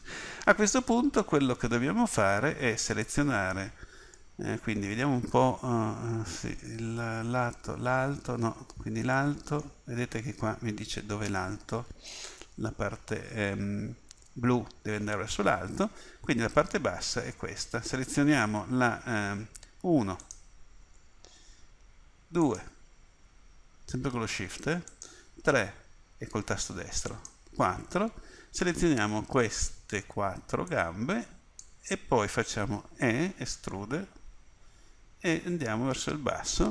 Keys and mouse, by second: 3.1-4.9 middle drag, 16.0-19.5 middle drag, 20.3-27.1 middle drag, 27.1-30.7 drag, 32.8 e.